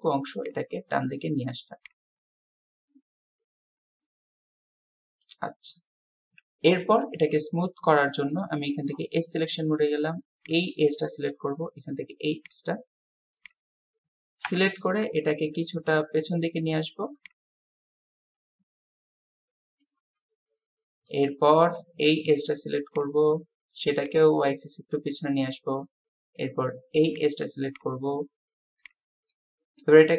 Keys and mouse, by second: 5.2-7.0 middle drag, 7.0-8.0 drag, 12.5 click, 14.5 KP_7, 17.1-19.8 drag, 20.2-21.2 drag, 21.8 click, 25.2 click, 25.4-25.9 drag, 28.9-29.9 drag.